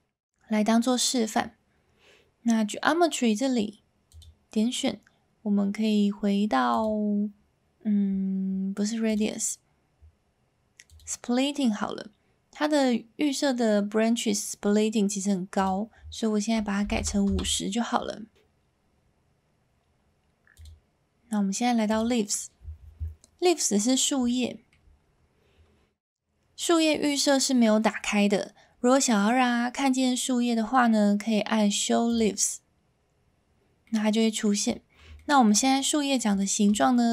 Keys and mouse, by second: 4.1-6.8 drag, 9.2-11.0 drag, 15.6-18.1 drag, 20.5-22.0 drag, 24.2-24.7 shift+middle drag, 33.8-34.4 middle drag, 35.2 shift+middle drag, 36.4 shift+middle drag.